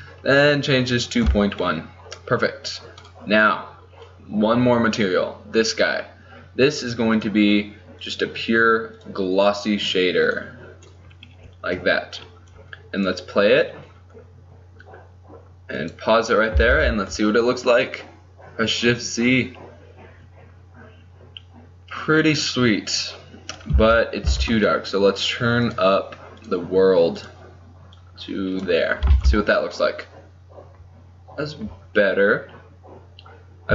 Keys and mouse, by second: 1.7-3.3 middle drag, 3.3 right click, 3.9-7.2 middle drag, 7.2-11.5 drag, 11.5-13.3 middle drag, 13.3-15.2 drag, 16.0-17.0 drag, 17.0 shift+z, 23.9 z, 24.4 z, 29.3 shift+z.